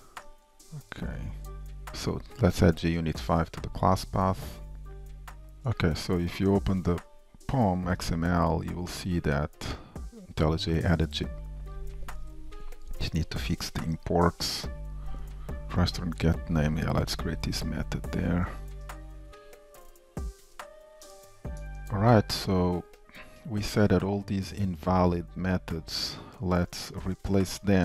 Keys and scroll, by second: 1.9 alt+Return, 12.3 ctrl+Tab, 15.1 F2, 18.3 alt+Return, 21.1 shift+Return, 21.8 ctrl+Tab.